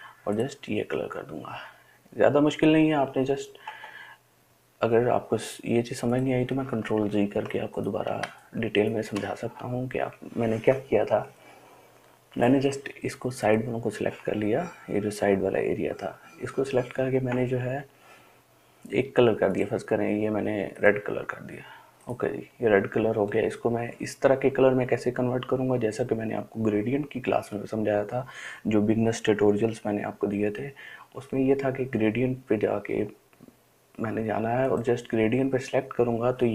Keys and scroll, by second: 0.0 i, 7.2-9.3 ctrl+z.